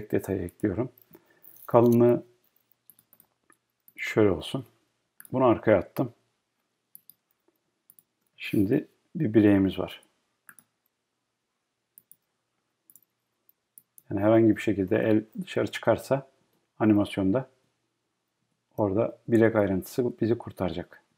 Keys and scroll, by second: 15.7 Left, 19.3 Up, 20.1 Right.